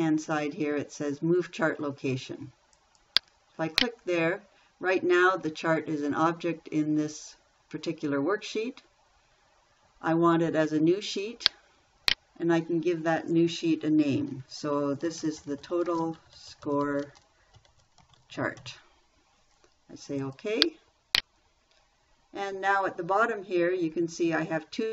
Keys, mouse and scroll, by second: 15.4-19.5 typing.